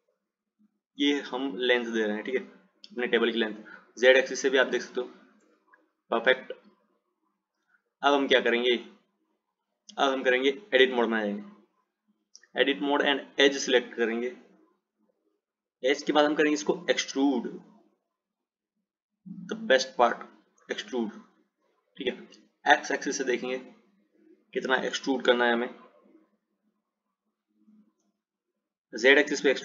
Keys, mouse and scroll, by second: 4.8 click, 7.7 click, 11.9 Tab, 13.6-16.6 drag, 16.7-18.4 drag, 19.7 click, 23.3 click, 25.8 click.